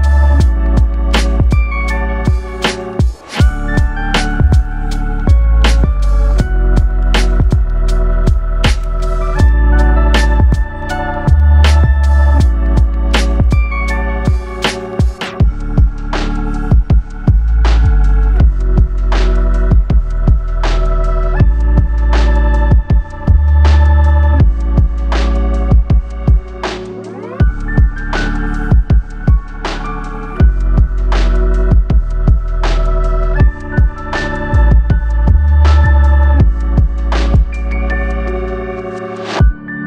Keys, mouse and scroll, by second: 0.8 click, 1.0 g, 6.4 click, 6.6 g, 9.5 click, 9.9 right click, 13.2 click, 13.4 g, 15.5 click, 15.7 g, 18.1 click, 18.3 g, 19.4 click, 19.5 g, 21.0 ctrl+r, 21.8 click, 22.3 g, 23.1 click, 23.3 g, 24.1 click, 24.2 g, 25.0 click, 25.1 g, 26.7 click, 26.8 g, 27.5 click, 27.7 g.